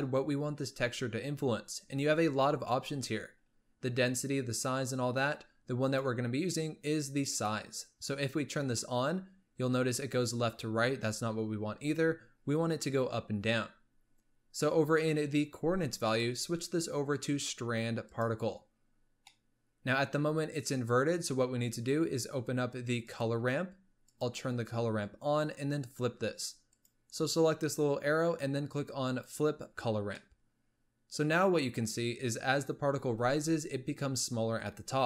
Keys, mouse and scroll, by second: 6.1 click, 7.6 click, 14.3-14.8 scroll down 7, 16.1-19.2 drag, 19.4-21.4 middle drag, 21.4-22.2 scroll down 8, 23.1-24.4 drag, 24.8-25.4 scroll down 7, 26.8-29.9 drag, 30.3-33.1 middle drag, 33.1 space, 34.9 space.